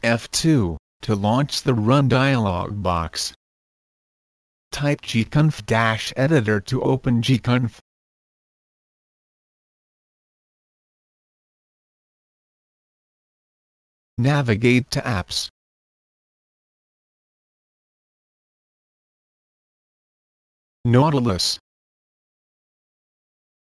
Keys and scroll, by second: 4.3-7.8 typing, 9.3 Return, 16.6-17.7 typing, 17.8 Return, 20.9-23.7 typing.